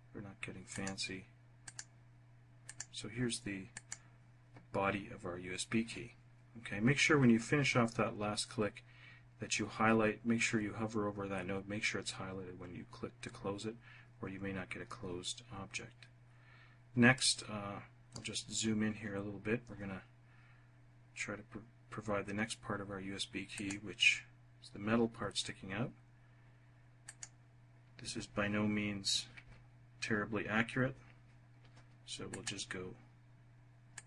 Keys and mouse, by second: 0.5 click, 1.5 click, 2.5 click, 3.6 click, 17.0-18.1 drag, 23.4 click, 26.9 click, 32.2 click, 33.7 click.